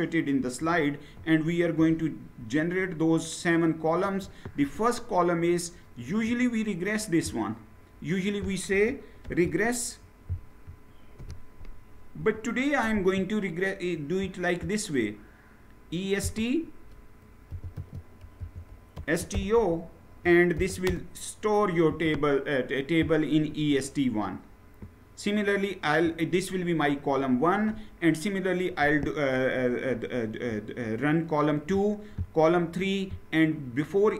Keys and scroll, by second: 0.1-3.2 Down, 8.9 Down, 8.9 ctrl+c, 10.9 ctrl+v, 11.9 Return, 17.2-20.6 typing, 21.6 Return.